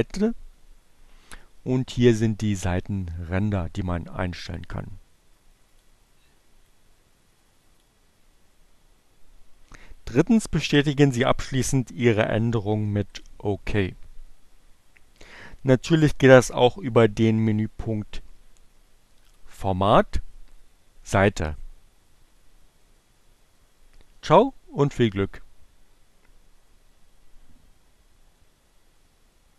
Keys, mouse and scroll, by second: 4.2 click, 6.5 click, 11.9 click, 19.1 click.